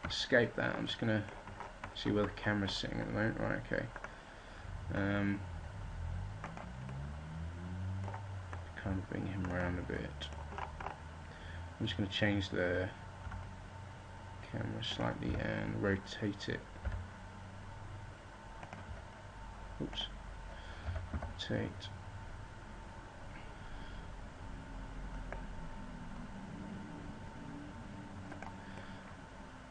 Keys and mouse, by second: 0.0 Escape, 3.4 right click, 4.4-7.1 drag, 8.8-10.0 right drag, 12.4-16.4 middle drag, 13.2 g, 16.4 r, 18.8 click, 18.9 x, 20.8 r, 29.2-29.7 middle drag.